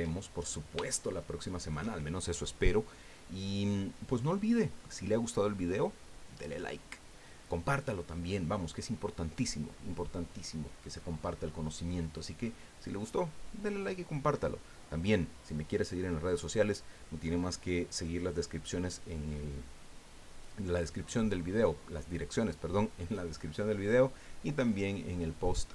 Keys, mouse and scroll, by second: 0.2-0.6 shift+scroll up 1, 0.9 shift+middle click.